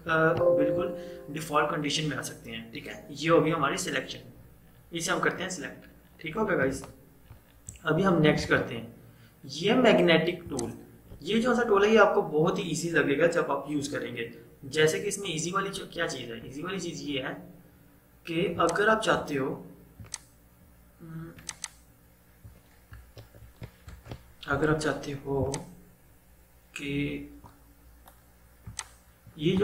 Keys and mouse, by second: 4.6 -, 6.7 ctrl+0, 8.5 right click, 10.5 click, 16.6-17.3 typing, 18.6-23.3 drag, 23.3 ctrl+z, 23.9 Escape, 25.4-29.6 drag.